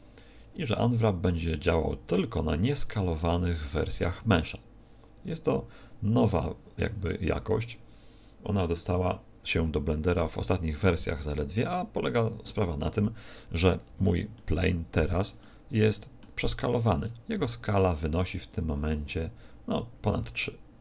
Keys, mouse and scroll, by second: 13.9 Tab, 14.3 middle click, 15.3 middle click, 17.3 n, 18.5 click.